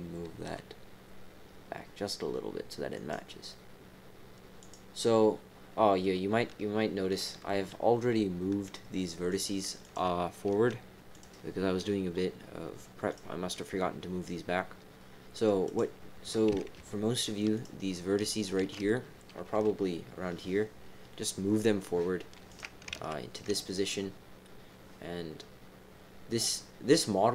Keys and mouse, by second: 0.4 g, 3.0 g, 4.6 click, 5.8 click, 7.0 click, 9.3 click, 9.8 click, 10.4 g, 13.1 click, 17.5 shift+click, 18.4 alt+shift+click, 19.5 g, 22.9 ctrl+z.